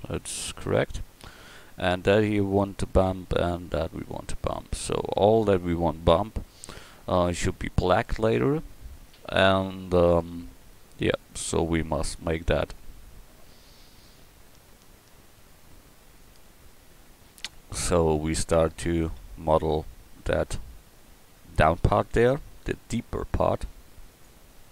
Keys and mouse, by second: 24.1-24.7 drag.